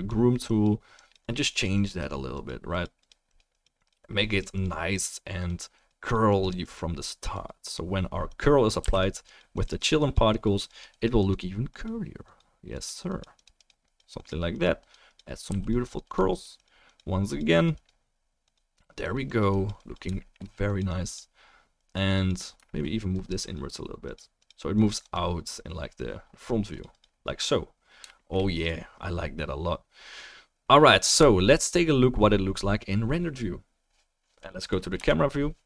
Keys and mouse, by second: 8.9 f, 9.0 drag, 15.5 f, 15.7 click, 17.2-17.8 middle drag, 20.2-20.5 shift+middle drag, 28.6-31.2 drag, 34.7 click, 34.9 KP_0, 35.1 click, 35.4 click.